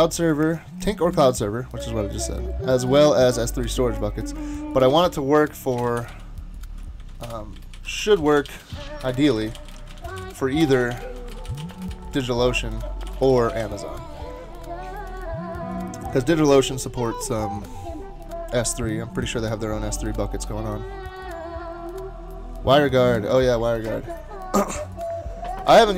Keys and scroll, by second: 4.9-14.0 typing, 7.0 shift+super+Left.